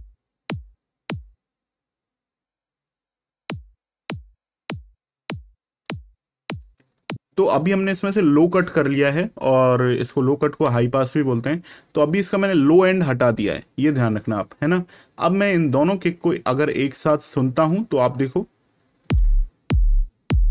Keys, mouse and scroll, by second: 6.9 click, 16.4 click.